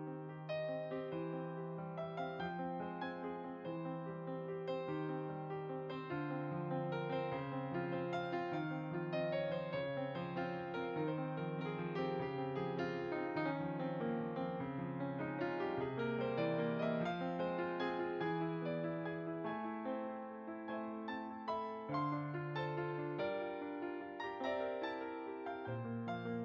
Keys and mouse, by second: 2.7 click, 3.8 r, 4.9 click, 7.0 r, 7.4 click, 12.9 g, 13.5 click, 16.6 shift+click, 19.0 ctrl+j, 20.2 click, 23.8 middle click.